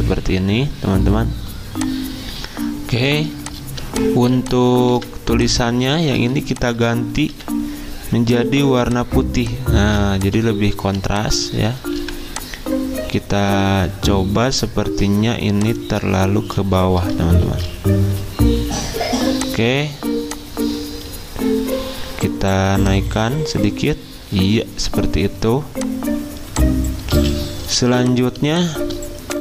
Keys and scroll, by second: 2.9 z, 4.9 v, 5.9 ctrl+z, 7.3 d, 9.8 z, 11.0 v, 13.5 g, 17.2 ctrl+z, 27.1 z, 28.4 v.